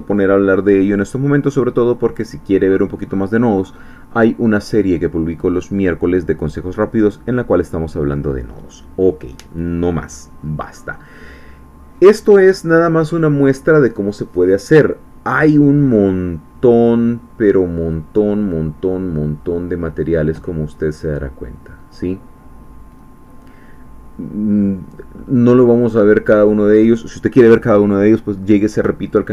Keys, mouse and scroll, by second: 0.2-1.1 scroll up 1, 17.5-18.4 scroll down 2, 18.5-19.1 scroll down 2, 19.5-20.7 scroll down 6, 20.7-24.5 scroll down 1, 24.5-24.8 scroll up 2, 25.2-25.8 scroll up 2, 25.8-27.5 scroll up 1.